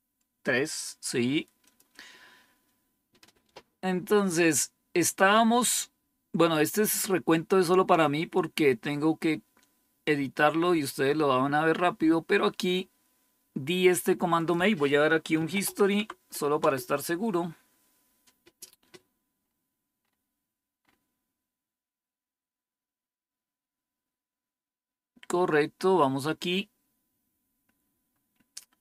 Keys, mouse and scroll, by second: 1.5 click, 4.8 scroll down 2, 5.5 scroll down 2, 6.8 scroll down 2, 7.6-8.0 scroll down 3, 8.7-9.2 scroll down 4, 9.9-10.2 scroll down 3, 10.8-11.4 scroll down 4, 14.3 click, 15.0-16.0 typing, 16.5 Return, 19.3-19.9 scroll up 1, 19.9 scroll up 1, 25.4-25.8 scroll down 3, 26.6-27.4 scroll down 6, 28.0 scroll down 2, 28.6 scroll down 2.